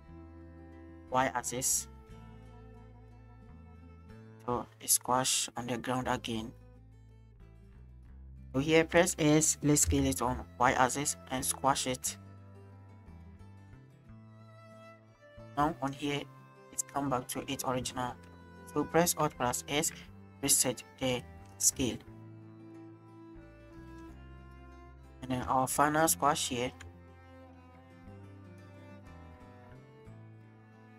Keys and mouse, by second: 3.2 click, 4.1-7.9 drag, 8.2 shift+click, 8.9 s, 9.9 y, 12.3 right click, 13.2 shift+click, 14.2-15.9 right drag, 19.6 alt+s, 21.3 drag, 21.8 space, 23.8 space, 24.4-25.2 drag, 25.9 shift+click, 26.7 shift+click, 27.4-30.9 drag.